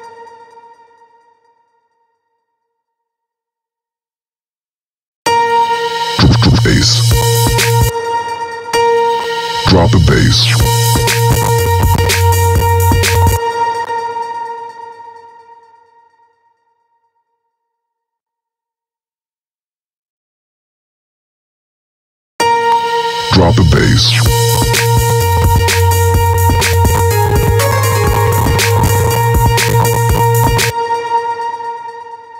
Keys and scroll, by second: 4.6 space, 7.4 space, 12.8 space, 21.8 space, 30.1 space.